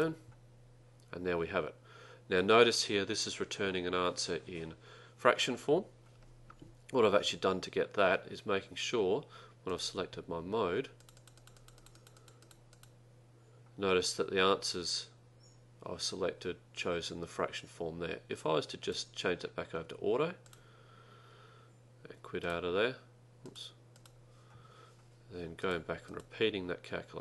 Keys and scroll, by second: 11.1 Down, 11.3 Down, 11.5 Down, 11.7 Down, 11.9 Down, 12.1 Down, 12.3 Down, 12.5 Down, 12.8 Down, 18.9 Down, 20.5 Return.